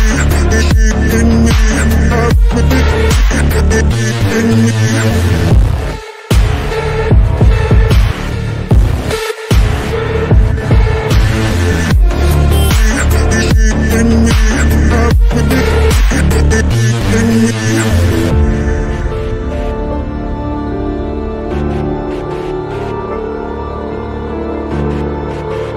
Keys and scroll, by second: 17.9 F3, 18.1 Escape, 20.4 shift+F2.